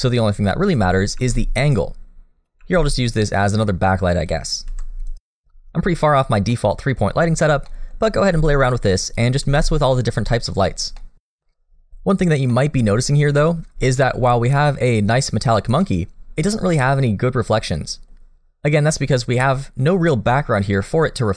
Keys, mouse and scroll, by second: 1.7 middle click, 2.6 middle click, 2.9 g, 3.6 r, 5.1 g, 5.6 r, 7.0 middle click, 7.5 scroll up 1, 7.7 middle click, 8.1 r, 8.9 g, 9.9 middle click, 10.7 g, 11.1 r, 12.5 middle click, 13.5 scroll up 1, 13.8 shift+middle click, 14.1-14.5 scroll up 1, 14.5 middle click, 15.8 middle click, 20.8 middle click.